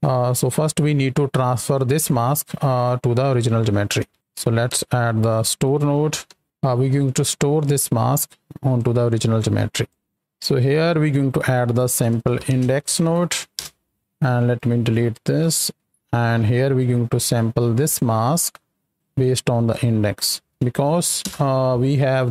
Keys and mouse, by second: 0.3 click, 4.1 shift+a, 7.7-9.8 drag, 10.1 ctrl+z, 10.8 click, 14.0 right click, 14.8 x, 15.0 click, 15.6 x, 16.0 middle click, 17.1-17.9 drag, 18.2 right drag, 19.3 drag.